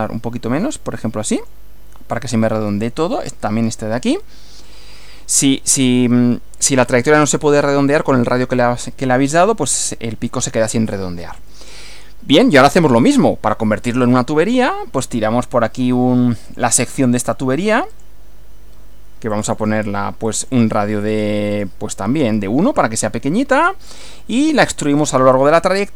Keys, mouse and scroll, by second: 0.5 scroll down 2, 1.4 click, 4.3-5.8 middle drag, 11.5-12.7 middle drag, 13.9 click, 16.5 click, 17.9 click, 19.3 click, 20.3 click, 21.0 click, 22.2 1, 23.0 click, 23.9 middle click, 24.9 click, 25.7 click.